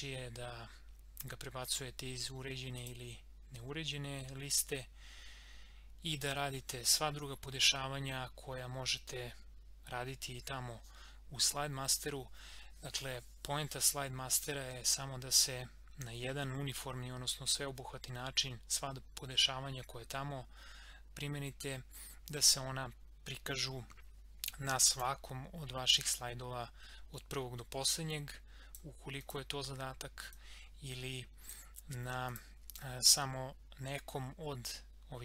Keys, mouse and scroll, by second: 2.8 click, 24.9-32.3 drag.